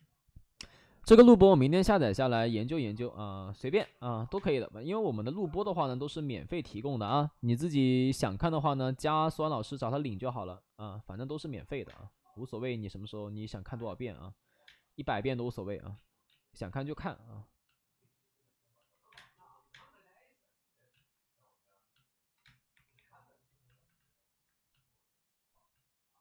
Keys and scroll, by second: 0.9 5, 1.0 space, 2.1 ctrl+z, 2.2 space, 3.6 1, 3.6 space, 4.3 space, 5.2 ctrl+z, 6.6 ctrl+z, 6.8 ctrl+z, 7.0 space, 7.5 space, 7.6 space, 9.1 ctrl+z, 11.8 space, 14.6 space, 15.8 ctrl+z, 16.2 ctrl+z, 16.6 ctrl+z, 19.0 1, 19.0 space, 19.6 space, 20.8 ctrl+z, 22.3 space, 22.6 3, 22.9 3.